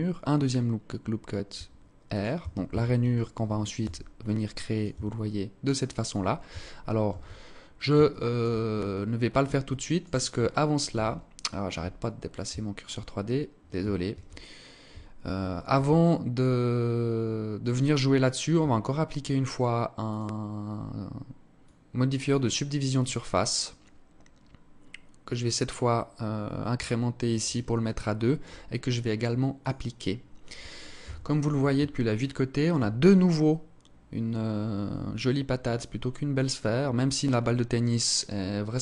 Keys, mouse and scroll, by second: 1.7 Tab, 2.0 Tab, 2.4 alt+right click, 3.2 s, 4.2 Tab, 4.6-5.2 scroll down 4, 5.0 click, 6.4 shift+c, 6.9 scroll up 4, 7.4 alt+shift+click, 8.2 alt+click, 9.0 click, 10.7 scroll up 3, 11.3 alt+shift+click, 11.3 scroll up 1, 12.4 scroll up 1, 15.4 alt+click, 19.4 click, 24.6 click, 27.2 alt+click, 28.9 click, 30.4 KP_1, 31.5 alt+shift+click, 32.4 scroll up 1.